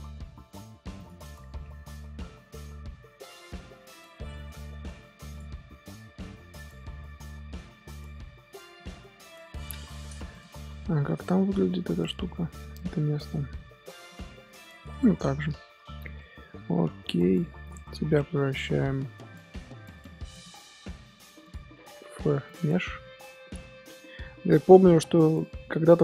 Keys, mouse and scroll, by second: 0.2 2, 0.9 alt+shift+click, 1.6 ctrl+b, 6.5-9.5 middle drag, 9.6 alt+h, 9.9-10.3 scroll down 1, 10.3 click, 10.5 scroll up 1, 10.7-13.6 shift+middle drag, 13.6 scroll up 2, 14.0-15.0 middle drag, 15.0-15.6 scroll down 10, 15.8-17.6 shift+middle drag, 17.6 click, 17.8-18.8 middle drag, 18.8-20.3 scroll up 1, 20.3-23.0 drag, 23.0-26.0 middle drag.